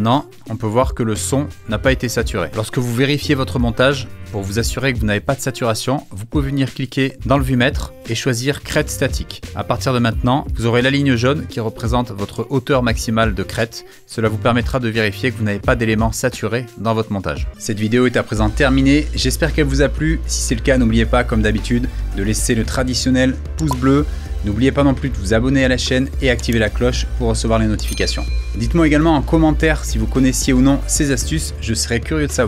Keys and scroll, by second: 9.4 space.